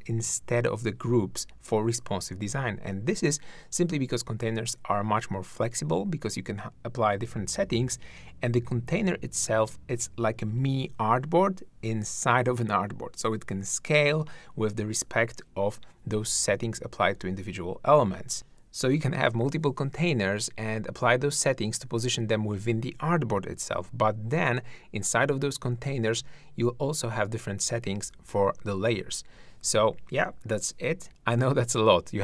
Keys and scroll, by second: 18.3 shift+`, 31.1 shift+`.